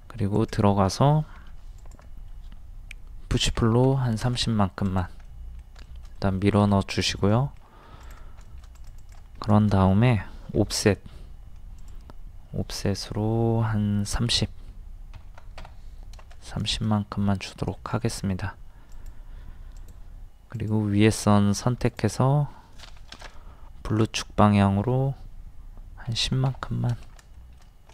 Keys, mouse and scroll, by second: 1.4 d, 1.8 click, 3.5 KP_3, 4.9 click, 5.3 middle click, 6.0 shift+middle click, 6.8 scroll up 1, 7.1 shift+middle click, 7.9 scroll up 1, 8.1 click, 8.5 shift+middle click, 8.8 click, 9.4 middle click, 10.6 o, 11.8 click, 15.2 KP_3, 16.7 shift+middle click, 17.2 scroll up 1, 17.8 shift+middle click, 18.1 scroll up 1, 18.9 click, 21.1 m, 23.0 Up, 26.1 KP_1, 26.2 KP_0, 27.4-27.9 shift+middle drag.